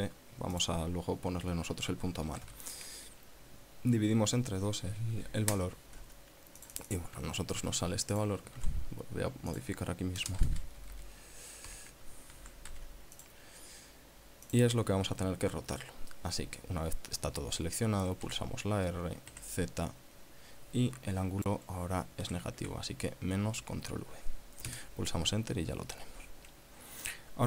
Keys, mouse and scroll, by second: 0.9 click, 2.6 KP_Divide, 2.8 KP_2, 5.8 KP_Enter, 6.9 click, 7.9 ctrl+c, 8.5 click, 8.9 ctrl+v, 9.8 click, 10.5 BackSpace, 10.8 Left, 12.0 ., 12.7 ctrl+a, 13.0 ctrl+c, 13.5 click, 14.9 click, 18.5 r, 19.6 z, 22.5 KP_Subtract, 22.9 ctrl+v, 25.0 KP_Enter.